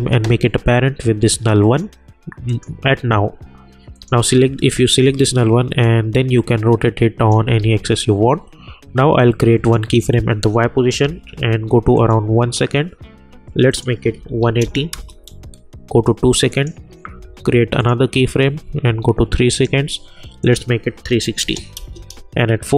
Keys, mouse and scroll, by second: 5.0 r, 5.8-7.7 drag, 7.7 ctrl+z, 9.6 click, 11.0 =, 11.9 click, 14.9 Return, 16.6 click, 21.7 Return.